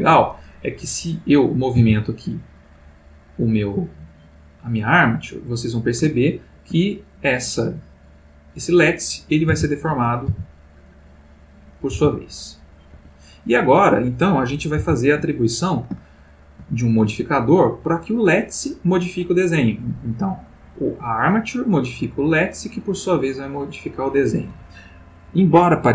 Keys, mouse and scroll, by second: 0.8 click, 1.7 r, 5.8 click, 6.2-6.9 ctrl+middle drag, 7.2 ctrl+click, 8.2 click, 9.6 alt+r, 10.3 alt+r, 11.1 click, 11.8 click, 12.0 r, 13.0 Escape, 13.7 click, 14.8 alt+r, 16.0-16.7 shift+middle drag, 17.5 click, 20.8 click, 22.3 click, 23.6 click.